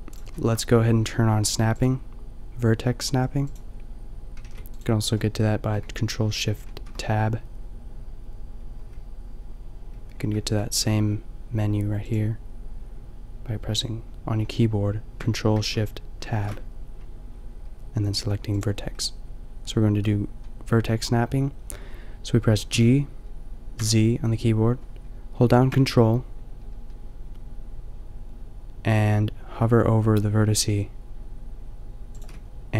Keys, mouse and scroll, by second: 4.3 g, 6.6 ctrl+shift+Tab, 10.6 ctrl+shift+Tab, 16.2 ctrl+shift+Tab, 22.7 g.